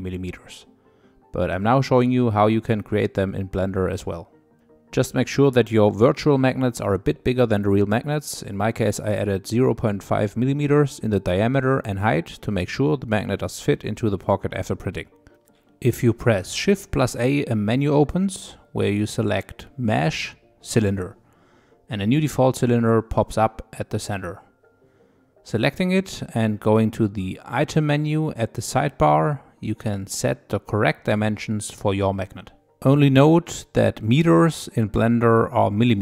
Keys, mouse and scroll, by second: 8.7 click, 9.1 middle click, 9.6 scroll up 5, 10.3 shift+middle click, 11.0 scroll up 2, 11.6 click, 12.9 g, 14.4 click, 16.3 shift+a, 23.8 scroll up 3, 24.3 shift+middle click, 24.8-25.4 scroll up 2, 27.1 click, 28.2 click, 29.1-32.4 drag.